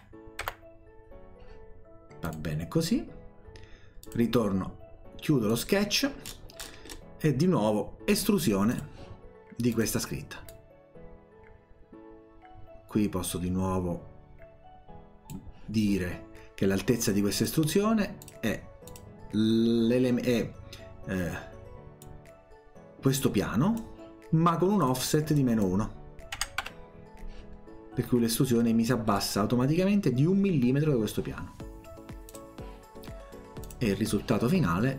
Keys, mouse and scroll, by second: 0.0-0.9 typing, 2.3 click, 4.1 click, 5.5 click, 6.3 scroll down 1, 6.9 scroll down 1, 8.8 click, 9.8 click, 10.5-15.3 drag, 17.4 click, 18.2 click, 18.9 click, 22.0-23.8 drag, 24.8 click, 25.4 click, 28.7-29.2 scroll down 4, 32.3 click, 33.7 click.